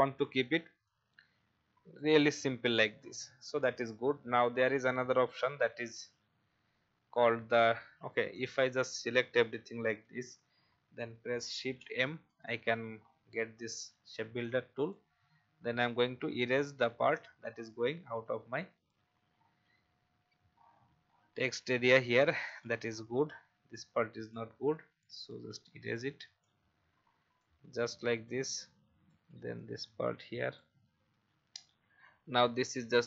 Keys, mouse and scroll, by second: 0.8-10.1 drag, 11.8 shift+m, 13.0 alt+scroll up 1, 14.4 alt+click, 16.0-16.4 alt+scroll down 1, 19.4-20.5 alt+scroll down 1, 20.5 scroll down 1, 21.6 click, 22.9 alt+scroll up 1, 23.7 alt+click, 25.5 alt+click, 27.3 click, 30.4 alt+click, 31.5 click, 32.4 typing, 32.7 alt+click.